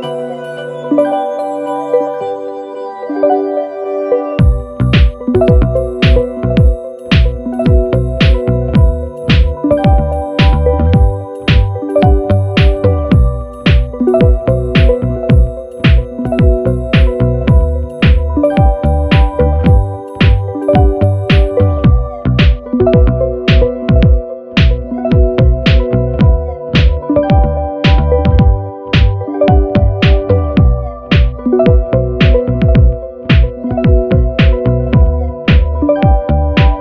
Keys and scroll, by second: 11.9 Escape, 31.3 Down, 32.6 Down, 33.8 super+-, 35.1 super+=.